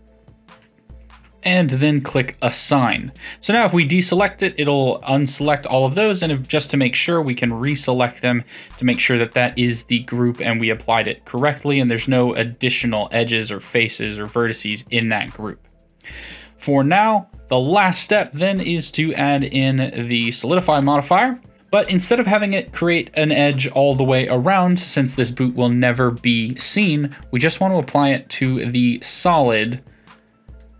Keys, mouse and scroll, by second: 2.4 click, 6.1 click, 6.8-9.8 middle drag, 10.4-13.4 middle drag, 17.0 click, 18.2-21.2 drag, 22.0-25.0 middle drag, 27.1-28.5 drag, 28.5-30.7 middle drag.